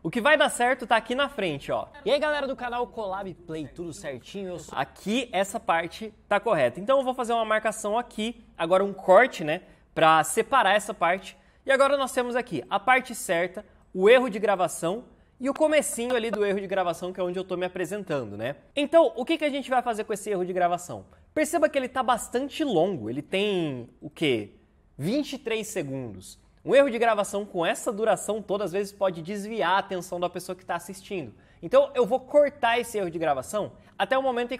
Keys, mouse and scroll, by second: 1.9 space, 7.0 c, 11.1 v.